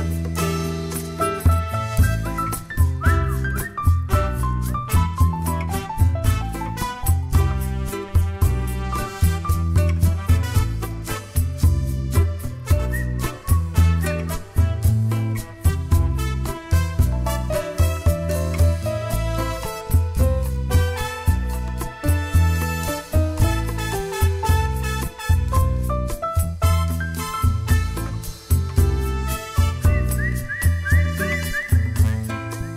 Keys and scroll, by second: 0.3 d, 7.3 ctrl+shift+a, 10.1 ctrl+d, 13.0 ctrl+a, 13.3-15.3 typing, 15.7 ctrl+a, 16.4 ctrl+a, 18.3-18.8 typing, 19.2 Return, 23.0 ctrl+a, 23.6-24.6 typing, 30.8 ctrl+shift+a.